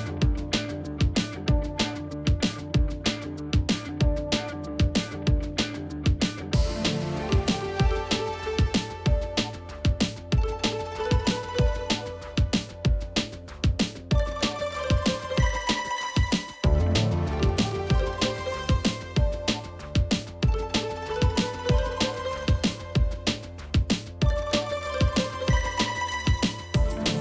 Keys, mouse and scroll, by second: 4.0 space, 11.4 ctrl+shift+], 13.7 ctrl+shift+], 15.9 b, 16.5 l, 19.5 alt+Up, 21.2 t, 21.8 ctrl+a.